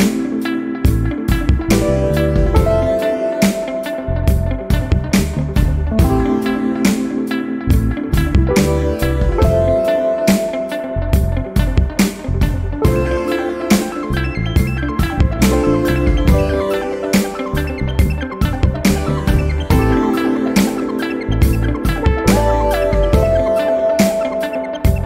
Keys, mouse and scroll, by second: 5.3 click, 6.3 click, 15.1 click, 15.7 1, 17.1 2, 20.1 0, 23.1-23.6 scroll up 4, 24.6 scroll down 2.